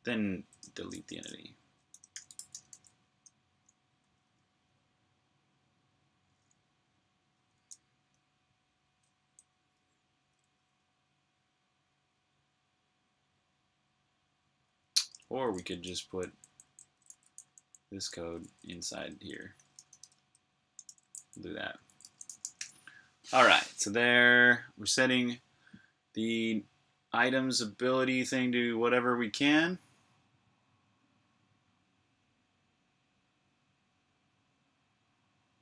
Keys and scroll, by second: 2.3-3.0 typing, 9.4-10.5 typing, 14.4-21.4 typing, 24.1-24.9 typing.